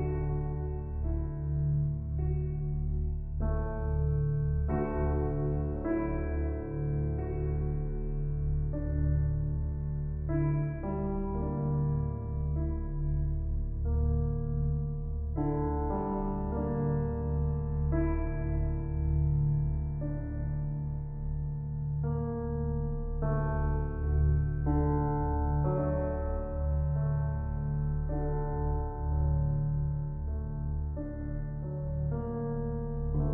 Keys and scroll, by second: 16.6 [, 24.5 ctrl+g.